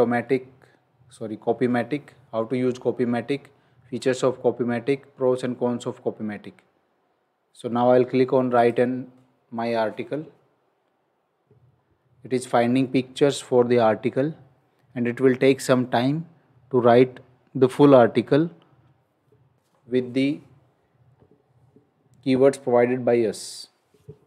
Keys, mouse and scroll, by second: 6.1 scroll down 1, 8.6 click.